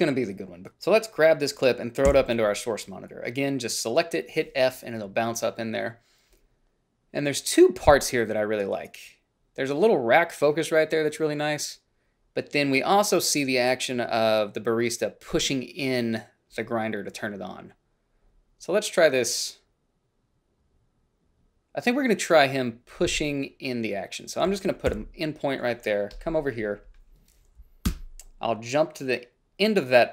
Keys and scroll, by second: 2.3 f, 25.1 i, 28.1 Up.